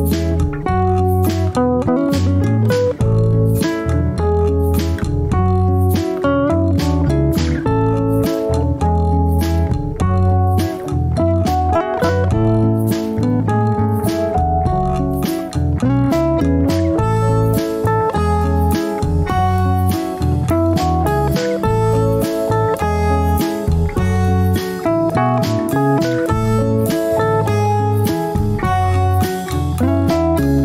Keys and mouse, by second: 0.0 middle click, 2.2 shift+middle click, 3.0 Tab, 4.8 alt+z, 5.9 Tab, 8.6 click, 9.3 click, 11.5 click, 12.1-13.3 drag, 13.3 middle click, 13.9 Tab, 15.9 click, 16.9-18.3 shift+middle drag, 18.8 ctrl+r, 19.8 Tab, 21.4 ctrl+r.